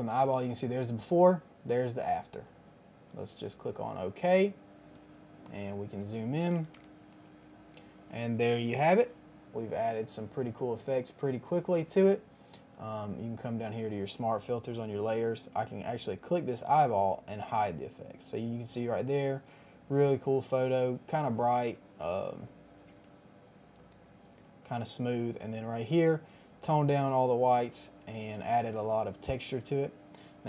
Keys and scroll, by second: 6.4 KP_1, 6.4 KP_0, 6.6 KP_0, 6.7 Return.